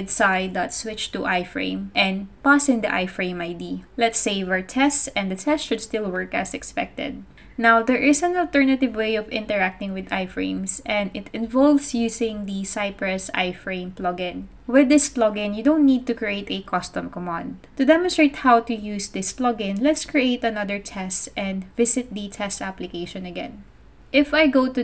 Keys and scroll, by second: 0.0-0.3 typing, 1.3-4.4 typing, 5.3 super+s, 16.1 Return, 16.2 Return, 16.3-22.5 typing, 24.2 Return, 24.7 super+Tab.